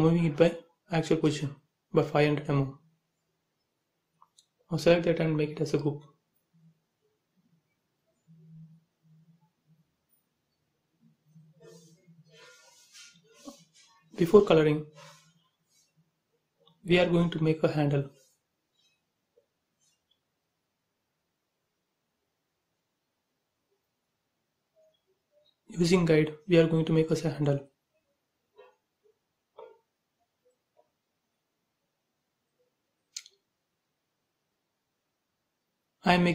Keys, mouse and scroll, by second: 0.0-1.3 typing, 1.7 click, 5.1 scroll up 1, 5.4 click, 8.2 middle click, 9.5 scroll down 1, 10.8 b, 13.8 click, 14.8 click, 17.6 space, 17.8 click, 18.1 middle click, 18.6 scroll up 1, 20.4 t, 21.1 scroll up 1, 22.0 scroll up 1, 22.5 click, 25.6-26.0 scroll down 1, 27.1 Down, 27.4 Right, 29.0 click, 29.1 space, 29.3 scroll up 1, 30.1 t, 30.5 click, 31.3-32.5 typing, 33.3 ctrl+z, 34.0 click, 35.0-35.3 typing, 35.6 Return.